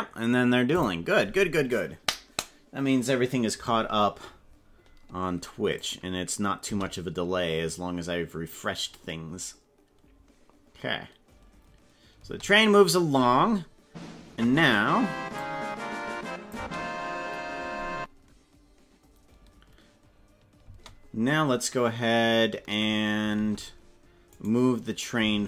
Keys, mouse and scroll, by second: 5.7 click, 6.6 space, 12.1 space, 15.3-16.8 drag, 16.5 space, 20.6 space, 23.3 ctrl+Tab, 24.3 right click, 25.3 ctrl+Tab.